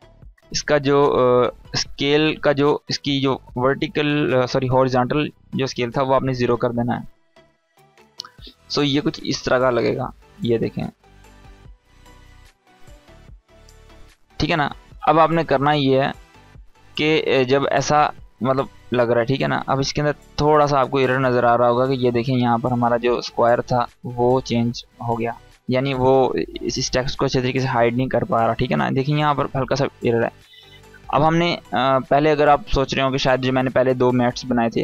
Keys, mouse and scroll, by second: 0.5-1.1 drag, 7.7-11.8 drag, 11.8 space, 14.0 space, 15.3-15.7 scroll up 1, 15.7 space, 15.9-16.5 click, 16.3 space, 17.1-18.4 drag, 19.8-20.2 scroll down 1, 20.7 scroll up 1, 20.9 space, 21.0-21.6 click, 21.4 space, 24.0-24.6 scroll down 1, 26.0 scroll up 1, 27.8 scroll down 1, 30.8-31.4 drag.